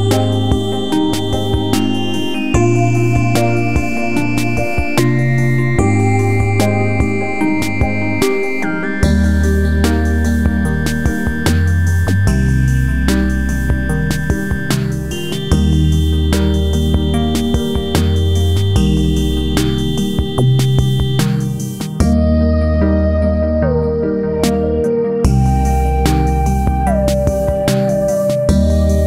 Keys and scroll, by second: 3.5 space, 26.9 space.